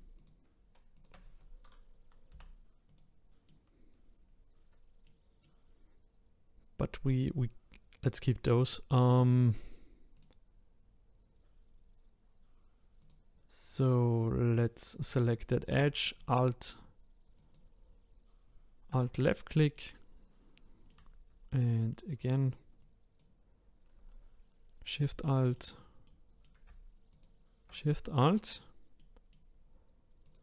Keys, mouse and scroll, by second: 0.1 shift+click, 0.9 shift+click, 2.3 Delete, 3.5-8.4 middle drag, 8.7-10.1 middle drag, 10.1 click, 13.0 click, 14.2 click, 16.2 alt+click, 17.4 alt+click, 19.7-22.8 middle drag, 22.8 alt+shift+click, 24.9-27.1 middle drag, 27.1 alt+shift+click, 27.8-30.2 middle drag, 30.2 click.